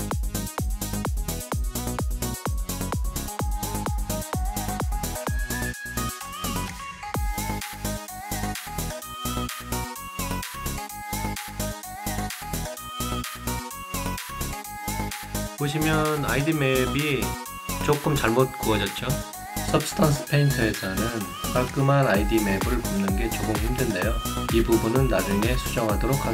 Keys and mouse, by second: 0.3 alt+right click, 0.6 alt+click, 1.6 alt+click, 1.7 alt+middle click, 2.3 click, 3.3 click, 3.9 click, 4.3 middle click, 7.5 alt+click, 7.7 alt+right click, 8.2 alt+click, 9.2 click, 10.0 click, 11.0 click, 14.0 alt+click, 14.1 alt+middle click, 14.3 alt+click, 15.0 alt+middle click, 15.4 alt+click, 16.2 alt+right click, 17.0 alt+middle click, 17.4 alt+click, 19.9 right click, 20.3 alt+click, 21.0 alt+middle click, 21.5 alt+middle click, 21.9 alt+click, 23.8 alt+right click, 24.1-25.1 alt+drag, 25.4-26.3 alt+drag.